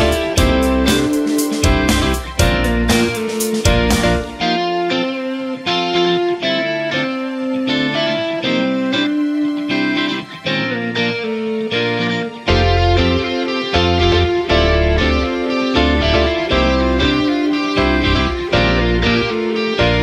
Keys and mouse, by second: 0.1 r, 0.9 g, 1.6 ctrl+r, 2.9 c, 3.9 m, 4.9 g, 6.7 right click, 7.1 c, 8.2 m, 9.3 ctrl+r, 10.6 c, 12.0 middle click, 12.7 KP_1, 13.2 KP_3, 13.8 c, 15.3 m, 17.7 g, 19.1 alt+right click, 19.4 g.